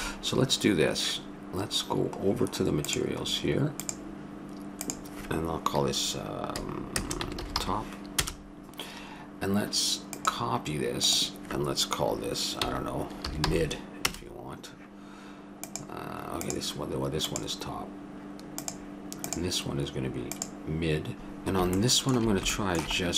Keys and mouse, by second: 3.5-8.2 drag, 10.1-13.0 drag, 15.6-21.2 drag, 21.8-23.1 middle drag.